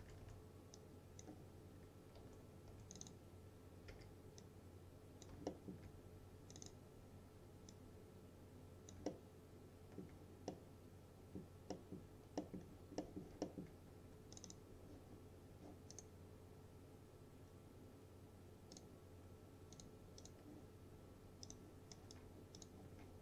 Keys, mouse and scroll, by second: 0.0-0.8 typing, 0.8-1.4 click, 1.8-2.2 scroll up 1, 2.2-2.8 typing, 3.0 click, 4.0 w, 4.5-5.4 click, 5.5 alt+middle click, 6.6-9.0 drag, 9.1-10.1 alt+middle drag, 12.7-13.1 scroll down 1, 13.1 middle click, 13.5 alt+middle click, 14.4 click, 16.0 right click, 18.8 click, 22.6 alt+click.